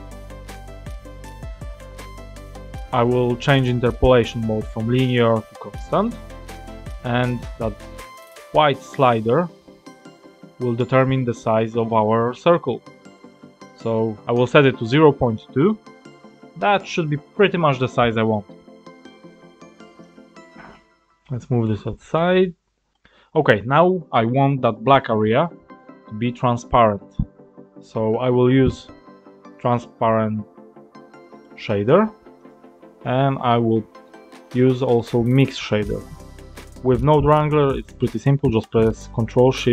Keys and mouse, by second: 4.7-5.9 drag, 8.1-13.0 drag, 15.2 click, 16.8 click, 18.8 click, 20.4 click, 21.6 click, 28.4 shift+a, 35.2 click.